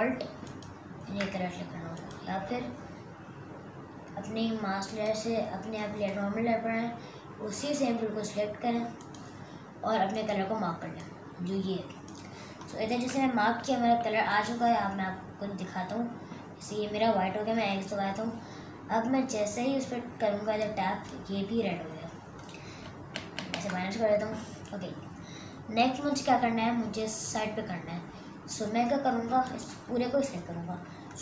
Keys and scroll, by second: 13.7 super+KP_Add, 23.4 super+KP_Subtract.